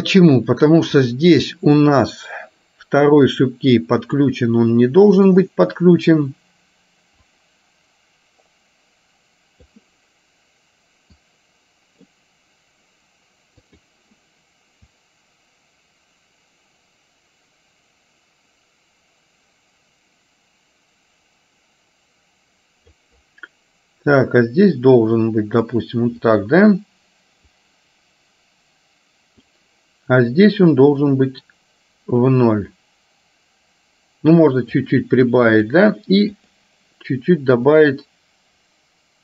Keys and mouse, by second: 1.2 click, 3.6 click, 5.2 click, 7.4-9.9 drag, 11.2-12.2 drag, 13.7 click, 15.1-23.2 drag, 24.4-25.9 drag, 26.4 click, 27.7-29.6 drag, 30.6-34.9 drag, 35.6 click, 37.9-39.2 drag.